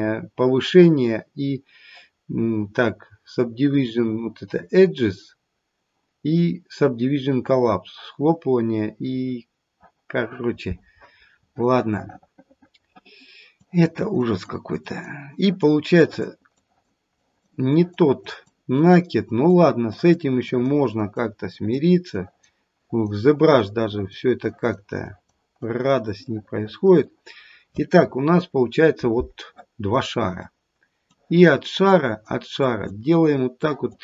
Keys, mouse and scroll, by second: 11.2-11.9 scroll up 2, 11.9 middle click, 13.5 click, 14.1 click, 14.8 click, 15.4 click, 15.9 click, 16.5 click, 17.1 click, 17.7 click, 18.2 click, 18.7 click, 19.2 click, 19.9 click, 20.4 click, 20.9 click, 21.4 click, 22.2 click, 22.7 click, 23.4 click, 23.9 click, 24.4 click, 24.9 click, 25.6 click, 26.2 middle click, 26.4-26.9 middle click, 26.7 middle click, 28.0-28.6 scroll up 2, 28.6-29.8 scroll up 1, 30.2-31.1 scroll down 1, 31.1 click, 31.8 click, 32.7 click, 33.6 click.